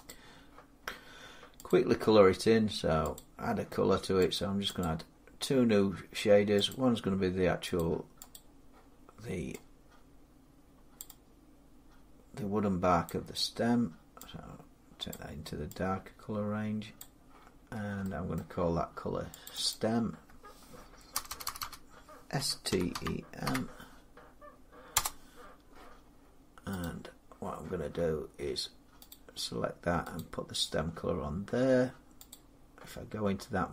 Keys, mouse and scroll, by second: 1.8 click, 3.0 click, 4.2 click, 4.6 click, 6.5 click, 7.6 click, 8.2 click, 10.8 click, 12.9 click, 14.9 click, 16.8 click, 17.5 middle click, 17.8 middle click, 18.2 middle click, 19.3 click, 19.5 click, 21.0-23.4 typing, 22.9 scroll, 24.8 Return, 26.6 click, 28.9 click, 30.0 click, 32.1 click.